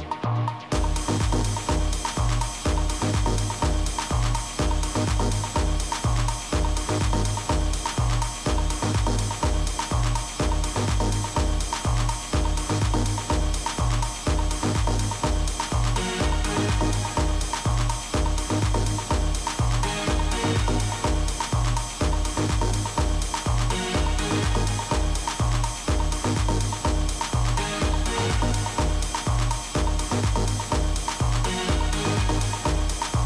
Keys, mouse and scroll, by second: 1.1-3.0 drag, 8.8-13.6 middle drag, 10.6 z, 17.2-19.9 middle drag, 19.9 s, 23.7-25.6 middle drag, 25.6-26.3 scroll up 1, 26.3-28.5 middle drag, 32.5-33.2 middle drag.